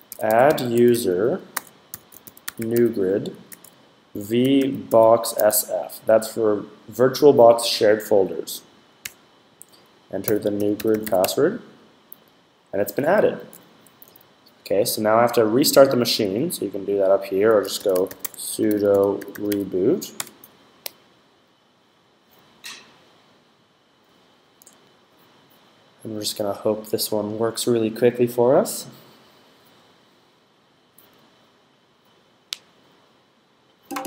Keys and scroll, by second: 0.0-5.8 typing, 9.9-11.4 typing, 17.2-19.8 typing.